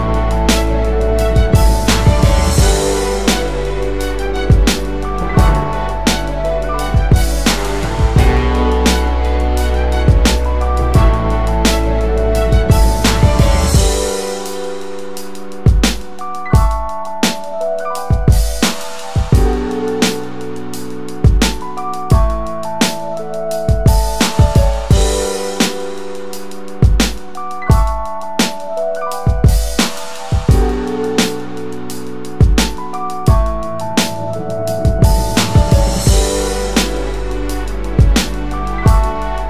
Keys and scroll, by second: 3.0-3.9 space, 5.3 alt+shift+space, 8.7 space, 11.4 BackSpace, 11.5 BackSpace, 12.4 Return, 13.8 space, 16.6-17.6 ctrl+space, 17.6 Return, 18.9 Up, 19.0 Down, 19.2 space, 20.5 space, 21.7 space, 24.2 space, 24.8 space, 25.7 space, 26.5 ctrl+0, 27.8 space, 33.6 ctrl+2, 34.0 ctrl++.